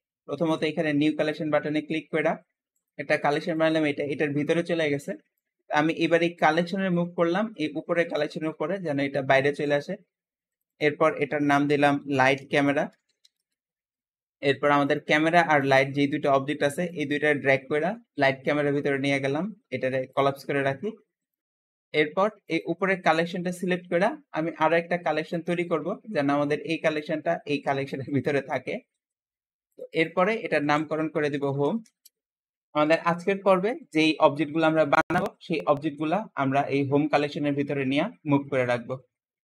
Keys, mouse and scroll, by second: 1.1-2.8 drag, 3.4 click, 5.2-6.6 drag, 9.6 click, 10.6-13.8 drag, 14.7 click, 15.4 shift+click, 16.8 click, 20.0 click, 21.1 click, 22.3 click, 25.1-29.0 drag, 29.6 click, 29.8-32.9 drag.